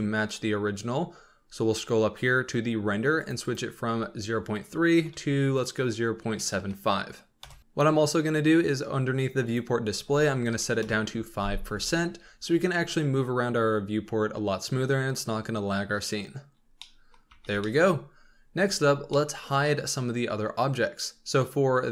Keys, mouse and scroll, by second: 1.0-3.3 scroll up 7, 3.3-6.4 drag, 7.6-9.5 scroll down 4, 9.5-16.1 drag, 16.6 scroll down 2, 16.8-17.3 middle drag, 17.3 z, 17.6-18.2 middle drag, 18.2 scroll up 2, 18.6 z, 19.1-21.9 middle drag.